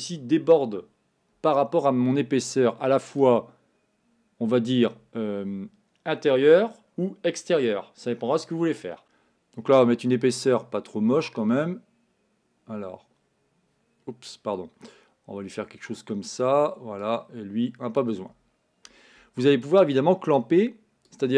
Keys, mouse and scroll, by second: 17.1-21.3 drag.